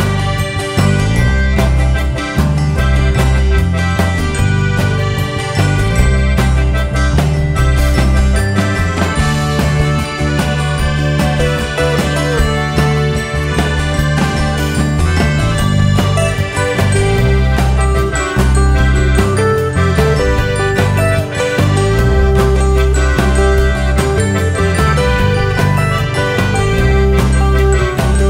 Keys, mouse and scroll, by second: 0.4 Tab, 1.2 Tab, 1.4-8.0 drag, 5.0-6.0 scroll down 2, 6.0 alt+a, 6.6 s, 7.2 scroll up 1, 8.4 alt+a, 8.9 click, 9.2 Tab, 9.5 alt+click, 9.8 KP_Decimal, 10.2-10.5 scroll down 1, 10.5 alt+click, 10.8 ctrl+KP_Add, 11.4 alt+click, 11.7 ctrl+KP_6, 11.9 ctrl+KP_Add, 14.3 click, 15.1 Tab, 16.5 click, 16.8 Tab, 16.9-17.4 scroll down 2, 17.4 alt+a, 17.9 scroll up 2, 18.1 `, 18.9 scroll down 2, 19.1 click, 19.4 KP_Decimal, 20.6-21.4 scroll up 2, 21.4 `, 22.4 alt+a, 22.6 click, 25.1-27.6 drag, 27.6 `, 27.9 scroll up 2, 28.1 `.